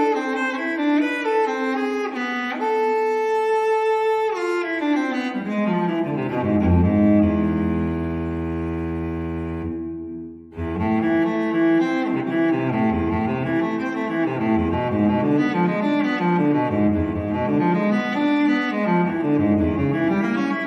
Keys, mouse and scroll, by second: 1.0 click, 2.4 click, 3.8 click, 5.3 click, 6.9 click, 13.2 click, 17.0 click, 18.8 click.